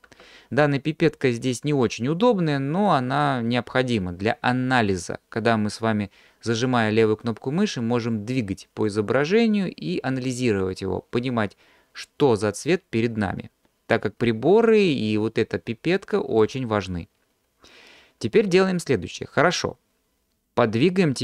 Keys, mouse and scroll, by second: 1.9-2.3 drag, 2.9-6.2 drag, 8.0-16.5 drag.